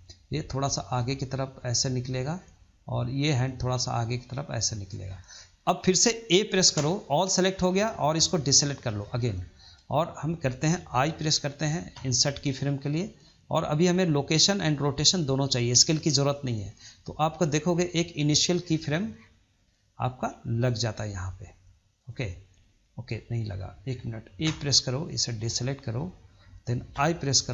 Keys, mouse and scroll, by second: 0.4 click, 1.8-2.7 middle drag, 2.7 click, 3.5 click, 5.0 scroll down 2, 5.2-6.6 middle drag, 6.6 a, 7.4-7.7 middle drag, 7.7-8.6 scroll up 2, 8.6 ctrl+drag, 9.1 scroll down 2, 9.3-11.8 middle drag, 11.8 i, 19.6-20.7 shift+middle drag, 20.7 scroll up 1, 21.0-21.9 shift+middle drag, 21.9 click, 22.7-24.3 shift+middle drag, 24.3 a, 25.2 ctrl+click, 25.8 middle click, 26.8 i.